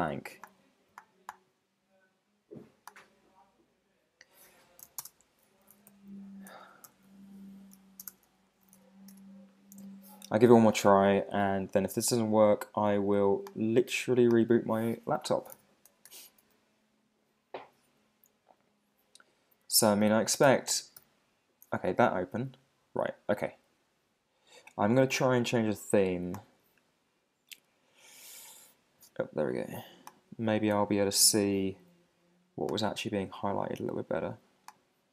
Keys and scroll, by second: 4.9 super+q, 5.0 super+space, 6.5 super+z, 6.9 super+n, 7.7 super+w, 8.0 super+space, 9.1 Return, 16.1 Return, 21.0 alt+super+i.